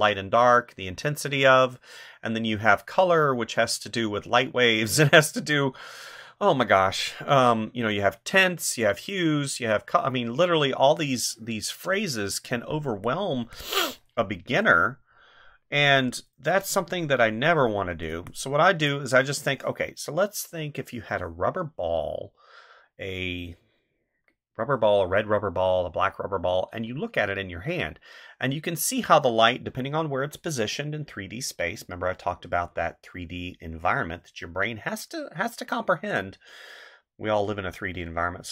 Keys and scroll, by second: 12.5 space, 18.1 space.